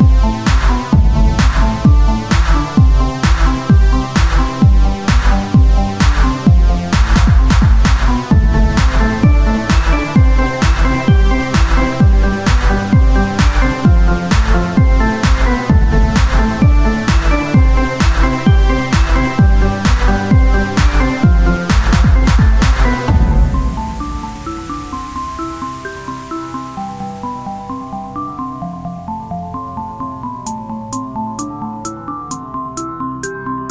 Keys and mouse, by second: 0.7 r, 2.1 Tab, 3.1 KP_1, 3.5 z, 4.8 shift+d, 5.8 z, 6.8-8.0 drag, 9.4 Tab, 9.9 KP_1, 10.2 Tab, 10.7 z, 11.5 shift+d, 12.4 z, 13.2-14.4 drag, 14.3 r, 16.4-17.8 drag, 16.5 Tab, 17.8 KP_1, 18.4 z, 20.2-21.4 drag, 20.4 shift+a, 24.4 s, 26.5 click, 27.5 s, 28.7 KP_3, 29.8 r, 31.1 KP_1, 32.7 r.